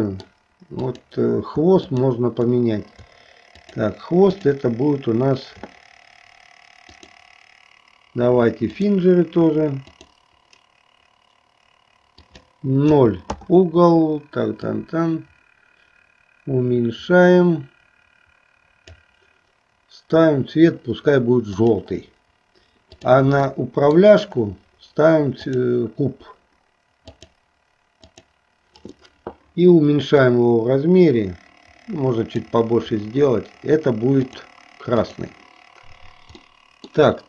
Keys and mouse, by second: 0.1 middle click, 1.0 click, 2.0 shift+click, 3.6 shift+click, 4.5 shift+click, 7.1-9.1 drag, 10.2-11.2 drag, 12.2-13.6 drag, 14.6-18.9 drag, 21.6 click, 23.0 click, 23.6 shift+middle click, 25.5-27.4 drag, 28.1 click, 30.2-32.6 drag, 35.2 click, 36.5 middle click.